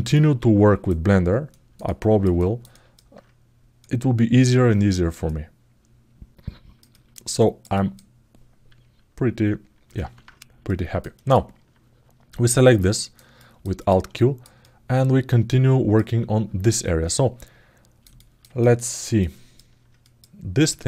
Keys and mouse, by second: 1.2 ctrl+alt+middle click, 2.1 ctrl+alt+middle click, 3.5-4.9 drag, 6.1 alt+middle click, 6.7 ctrl+alt+middle click, 7.1 alt+middle click, 7.5 ctrl+alt+middle click, 9.8 alt+q, 10.4 middle click, 10.9 alt+middle click, 12.5 middle click, 13.1 middle click, 13.5 alt+middle click, 13.9 alt+shift+middle click, 14.3-15.7 alt+middle drag, 16.5-18.2 alt+middle drag, 18.4 ctrl+alt+middle click, 18.9 alt+middle click, 19.8 click, 20.5 alt+middle click.